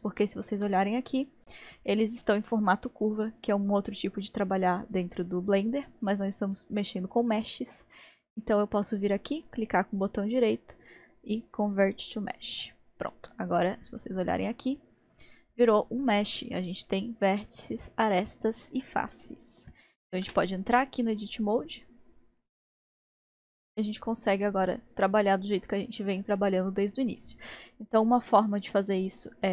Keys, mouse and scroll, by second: 1.2 click, 8.2 click, 9.6-12.8 right drag, 14.4-17.5 drag, 17.6 click, 19.2-20.2 shift+middle drag, 20.2 Tab, 20.8 scroll, 20.8 scroll up 2, 22.4 click, 23.2 click, 24.1 click, 25.7 click, 27.2 click.